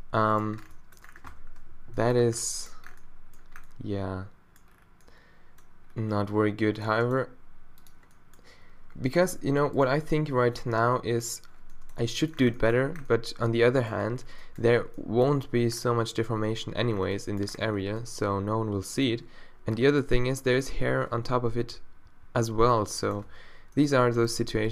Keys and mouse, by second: 0.3 click, 0.6 Tab, 1.3 Tab, 1.7 z, 2.2 Tab, 14.2 click, 14.3 middle click, 14.7 middle click, 15.7 middle click, 15.8 click, 16.9 middle click, 18.9 click, 19.9 click, 21.2 z, 22.1 z, 23.3 Tab.